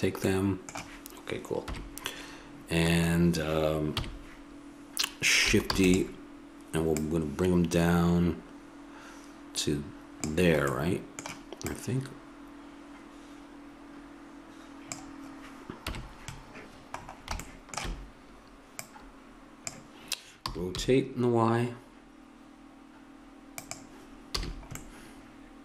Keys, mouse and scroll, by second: 1.7 KP_1, 4.0 KP_3, 5.7 shift+d, 10.7 middle click, 11.7-14.3 drag, 15.9 KP_1, 18.8-23.5 drag, 20.4 r, 24.4 a, 24.6 middle click.